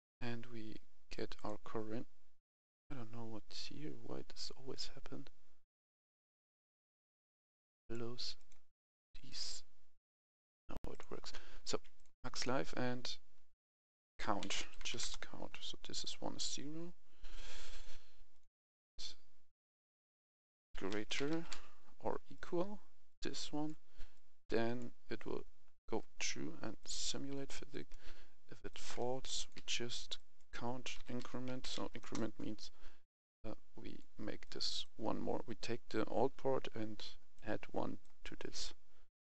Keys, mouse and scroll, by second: 0.2-0.8 scroll up 1, 1.3-11.2 drag, 11.2 scroll down 1, 11.8 click, 12.5 F2, 14.1-14.8 typing, 14.9 Return, 15.9-20.4 drag, 20.4-21.4 typing, 22.2 click, 25.8 right click, 26.7 click, 27.6 right click, 28.6 click, 29.2 ctrl+c, 29.3 click, 29.5 v, 30.0 click, 30.9-31.6 typing, 31.9 Return, 32.9 click, 37.2-39.2 drag.